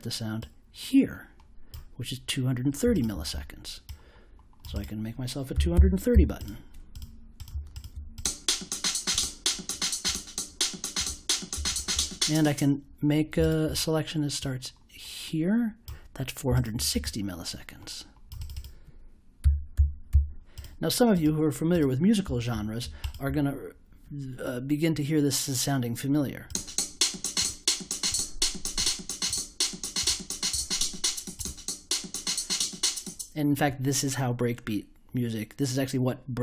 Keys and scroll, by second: 5.2-6.6 typing, 19.1-20.5 typing.